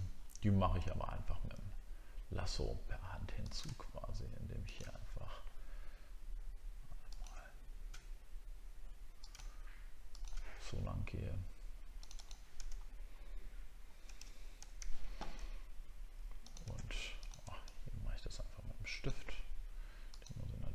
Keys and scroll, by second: 0.1 alt+scroll up 1, 12.8 alt+scroll up 1.